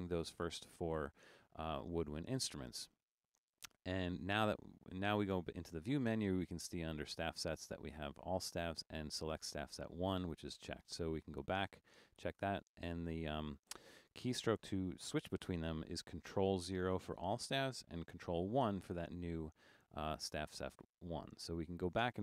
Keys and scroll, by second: 18.7 ctrl+1, 21.6 ctrl+0.